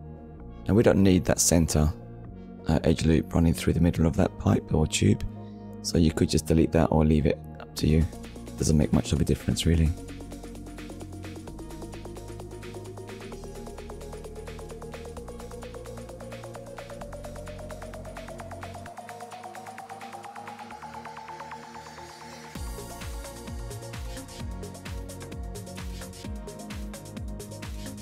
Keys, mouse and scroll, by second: 0.0 click, 1.0 middle click, 2.2 click, 2.9 shift+middle click, 3.3 middle click, 4.4-4.8 scroll down 1, 5.2 KP_1, 6.0 shift+middle click, 7.2 scroll down 1, 7.8 shift+middle click, 9.3 ctrl+s, 11.9 click, 13.8 click, 14.3 shift+middle click, 15.1 scroll up 1, 16.2-16.6 scroll up 1, 18.4 click, 20.5 Tab, 22.2 click, 26.3 alt+click.